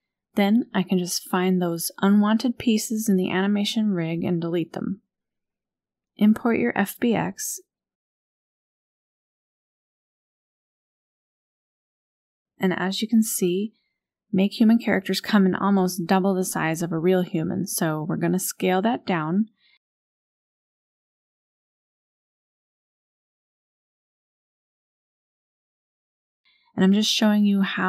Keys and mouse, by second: 2.9 Delete, 4.8-5.3 shift+drag, 7.4-10.1 drag, 13.4 KP_1, 13.8 KP_Decimal, 16.6 click, 22.5-23.4 drag, 25.0 Delete, 25.8 click.